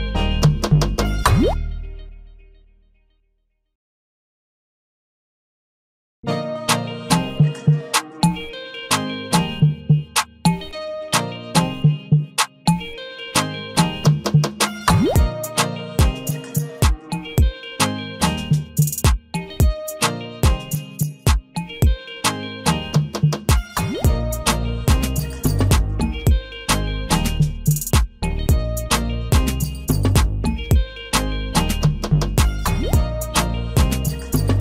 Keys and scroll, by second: 25.2 ctrl+a, 29.0 ctrl+d.